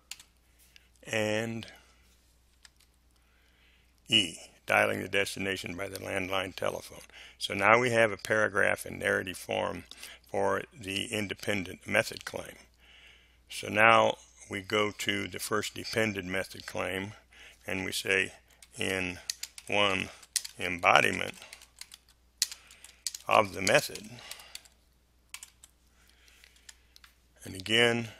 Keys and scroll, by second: 0.0 ,, 2.5 space, 2.7 Delete, 18.6-25.0 typing, 26.5 space.